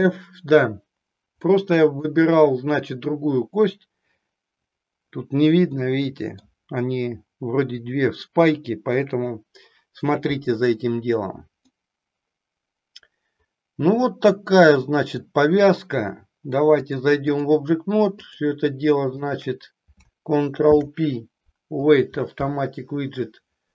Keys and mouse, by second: 1.5 middle click, 5.8 middle click, 11.7-15.3 middle drag, 16.7 click, 18.2 click, 19.2 shift+click, 20.6 ctrl+p.